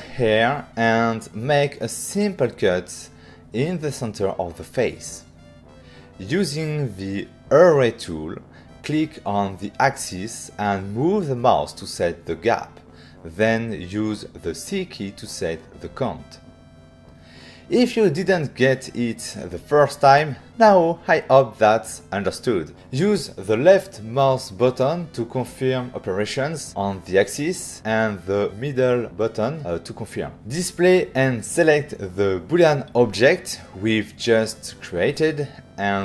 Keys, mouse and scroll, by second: 0.6 f, 1.5 click, 2.3 right click, 3.0 ctrl+scroll down 1, 3.4-3.7 ctrl+scroll up 1, 3.7 shift+click, 4.5 shift+click, 5.6 shift+click, 6.1 shift+click, 6.5 click, 6.9 click, 7.6 click, 9.1 ctrl+middle click, 11.5 click, 14.1 c, 18.7 click, 21.1 click, 22.0 middle click, 24.1 click, 25.3 click, 26.5 f, 27.5 click, 28.3 click, 29.1 ctrl+middle click.